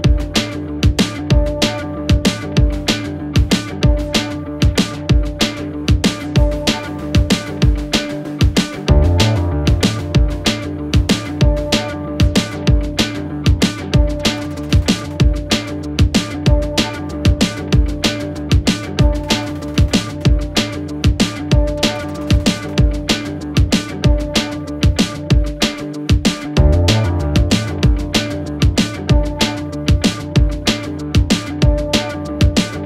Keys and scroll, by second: 12.8 s, 23.2-24.1 typing, 26.1 ctrl+z, 28.4 1, 28.8 Return, 32.7 1.